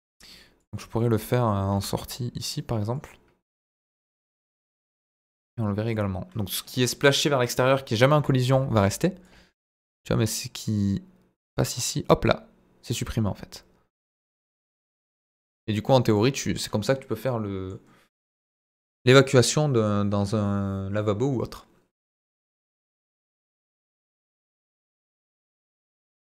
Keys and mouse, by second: 0.6 click, 0.9 middle click, 1.7 g, 1.7 middle click, 2.9 click, 5.0 click, 5.9-8.2 drag, 9.2-16.2 drag, 16.4-16.9 middle drag, 17.2-17.6 middle drag.